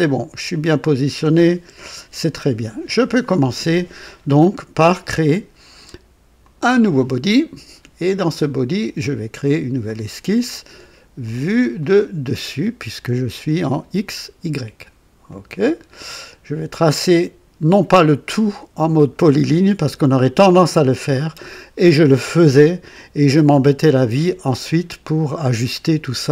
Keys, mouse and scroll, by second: 0.0 typing, 1.6 KP_2, 6.3 click, 9.8 click, 11.7 click, 15.2 click.